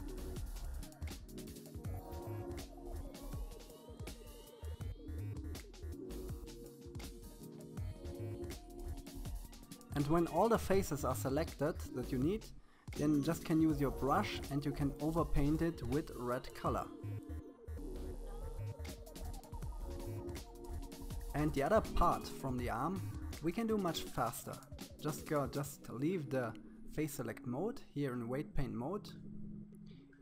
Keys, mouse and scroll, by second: 0.0 middle click, 0.1 scroll down 3, 0.2 middle click, 0.5-1.2 scroll up 6, 0.6 shift+middle click, 0.8 shift+middle click, 1.2 c, 2.1 scroll up 1, 2.2 c, 2.4 scroll down 2, 2.5 middle click, 2.7 c, 3.3 middle click, 3.6 c, 5.2 scroll down 3, 5.2 middle click, 5.3-5.7 scroll up 2, 5.5 shift+middle click, 5.7 c, 6.5 shift+middle click, 6.7 c, 7.2 scroll down 2, 7.4 c, 8.1 scroll down 2, 8.2 middle click, 8.3 scroll up 2, 8.5 c, 8.9 middle click, 9.1 c, 9.5 middle click, 9.6 KP_1, 9.8 scroll up 4, 9.9 c, 10.4 scroll down 9, 10.6 middle click, 10.9 click, 10.9 scroll up 7, 11.2 scroll down 1, 11.3 f, 12.1 click, 13.0 middle click, 13.4 click, 14.1 right click, 14.4 middle click, 14.8 click, 15.9 click, 16.6 click, 17.4 right click, 17.7 KP_1, 17.8 middle click, 18.0 click, 19.3 shift+middle click, 20.4 KP_1, 20.5 scroll up 2, 20.7 click, 24.8 f.